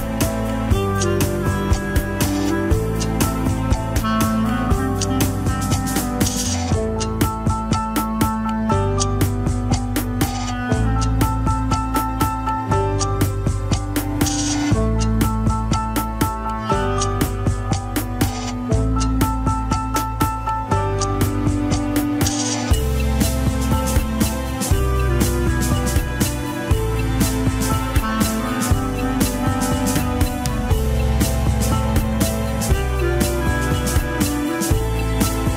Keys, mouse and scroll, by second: 0.9 alt+z, 1.3 click, 1.7 alt+z, 1.9 middle click, 2.5 g, 5.2-6.5 middle drag, 6.5 g, 8.3 middle click, 9.3 KP_1, 9.6-10.0 scroll up 3, 10.0 ctrl+Tab, 10.3 shift+click, 10.6 ctrl+Tab, 11.8 alt+z, 12.6 ctrl+click, 12.7 alt+z, 12.9 middle click, 13.6 scroll down 2, 13.9-15.0 middle drag, 15.0 ctrl+click, 15.1-16.9 middle drag, 16.9 alt+z, 17.5 alt+z, 17.8-19.7 middle drag, 19.7-21.5 drag, 21.5-21.8 scroll up 1, 22.1-23.2 drag, 23.2-24.8 middle drag, 24.8 click, 25.5 middle click, 26.2-26.5 scroll down 2, 26.5 alt+z, 27.3 ctrl+click, 28.1 alt+z, 28.3 middle click, 28.8 scroll up 1, 29.2 click, 29.8-31.5 middle drag, 31.5 ctrl+z, 31.8-33.7 middle drag, 33.7 ctrl+click, 34.5-35.5 middle drag, 35.4 ctrl+click.